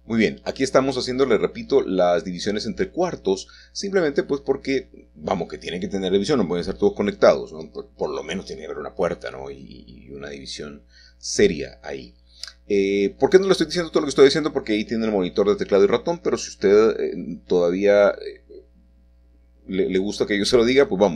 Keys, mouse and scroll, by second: 1.1 click, 1.6 Tab, 4.9-5.9 drag, 6.7-7.8 drag, 8.1 r, 14.2 Return, 15.9 g, 18.4 click, 18.8 middle click, 20.6-21.1 scroll up 3.